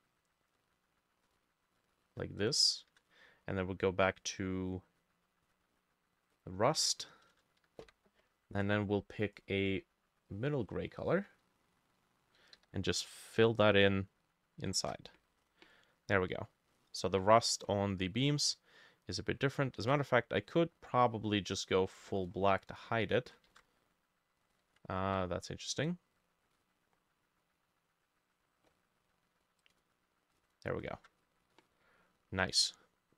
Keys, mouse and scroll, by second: 2.4 shift+click, 7.0 scroll down 1, 7.8 b, 9.7 click, 12.6 f, 14.8 ctrl+shift+a, 15.4-16.2 scroll up 3, 16.2-16.7 scroll down 1, 16.7 middle click, 17.4 middle click, 19.8 ctrl+z, 23.5 ctrl+shift+a, 24.7 ctrl+z, 31.0 ctrl+shift+a, 31.2-31.6 scroll down 1, 31.6 middle click.